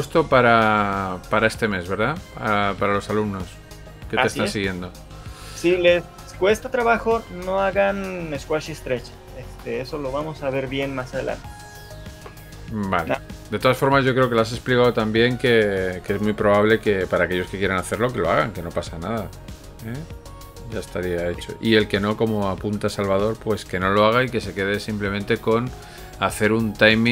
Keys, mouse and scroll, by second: 1.3 middle click, 1.3 click, 1.3 scroll up 2, 2.7 shift+middle click.